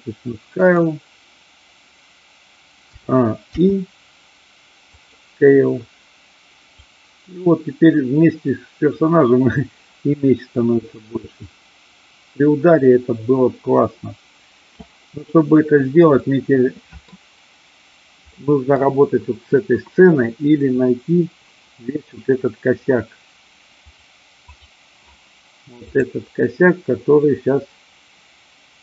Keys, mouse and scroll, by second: 0.6 click, 3.0 a, 3.5 i, 6.8-14.8 drag, 16.1-17.1 middle drag, 18.4 middle click, 26.0-28.8 drag.